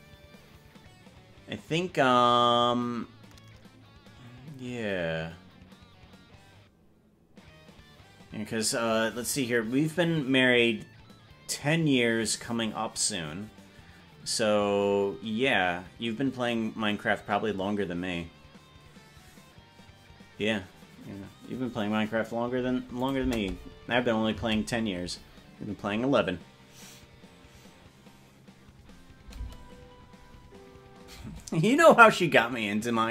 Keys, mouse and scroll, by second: 23.1-29.0 drag, 23.3 space, 24.5 space, 29.6 space, 31.4 space.